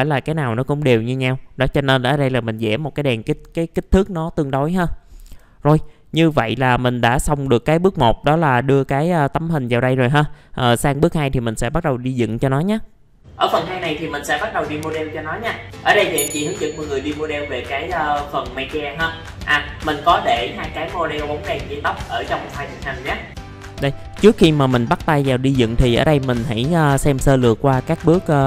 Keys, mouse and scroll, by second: 1.2 middle click, 3.9 Delete, 4.4-4.9 scroll down 1, 4.9 middle click, 5.2 F4, 5.7 click, 6.1 middle click, 6.8-7.4 scroll up 1, 7.4 middle click, 23.3 middle click, 27.6-28.0 scroll down 1, 28.0 middle click.